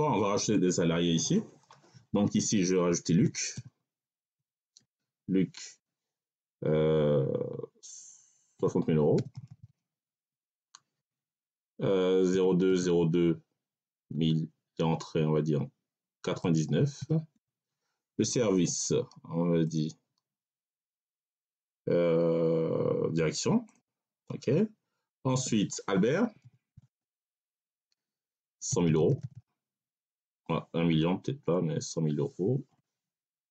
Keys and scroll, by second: 3.1 l, 3.4 u, 4.1 c, 4.6 Tab, 8.4 6, 9.0 0, 10.2 Tab, 12.2 0, 12.3 2, 12.6 0, 12.7 2, 14.0 1, 16.1 9, 17.2 Tab, 26.1-27.1 typing, 27.3 Tab, 28.4 1, 28.6 0, 29.8 Tab, 32.6 BackSpace.